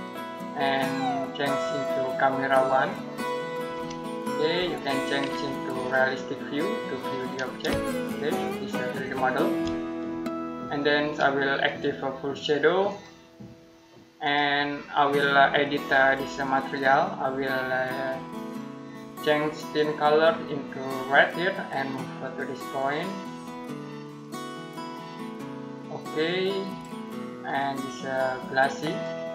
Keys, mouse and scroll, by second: 4.4 middle click, 5.6 click, 7.8 shift+middle click, 9.5 middle click, 11.5 click.